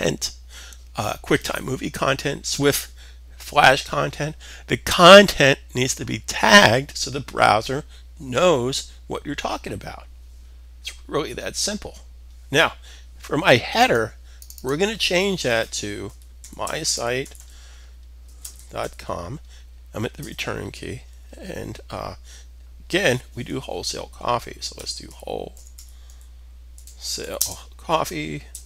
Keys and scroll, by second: 15.4-18.7 typing, 24.3-28.6 typing.